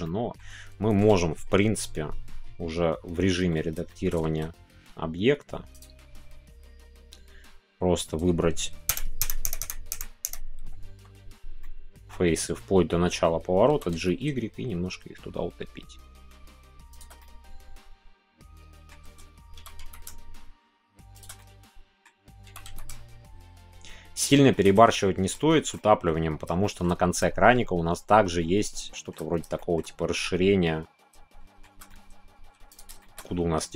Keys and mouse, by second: 0.0-3.3 middle drag, 3.3 Tab, 3.9 shift+middle click, 4.3 Tab, 5.8-7.3 drag, 8.9 ctrl+KP_Add, 11.6-13.3 middle drag, 17.2-18.9 middle drag, 20.1 shift+y, 21.1 click, 21.3 middle click, 22.9 shift+y, 24.1 shift+click, 24.4 shift+middle click, 25.5 shift+middle click, 26.6 shift+middle click, 28.8 shift+middle click, 29.5 shift+middle click, 31.2 shift+middle click, 31.8 middle click, 33.0-33.7 shift+middle drag.